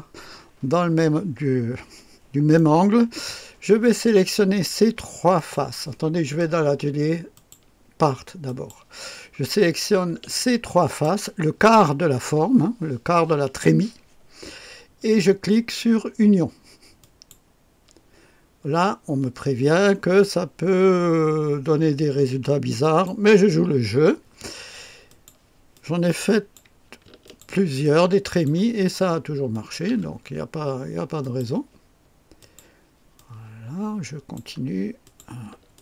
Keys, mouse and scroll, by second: 2.6 right click, 5.4 click, 7.3 click, 8.5 click, 10.3-11.5 ctrl+drag, 17.0 click, 22.8 click, 25.1 click, 25.7 click, 27.3 ctrl+click, 27.8 ctrl+click, 28.6 ctrl+click, 29.5 ctrl+click, 31.2 click, 32.4 click, 33.2-34.4 drag, 35.0 click, 35.7 ctrl+click.